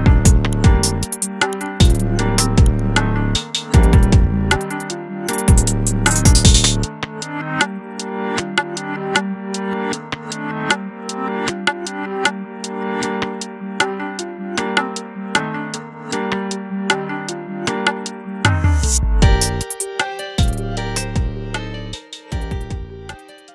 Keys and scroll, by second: 17.0 alt+Tab, 18.8 alt+Tab, 18.8 space.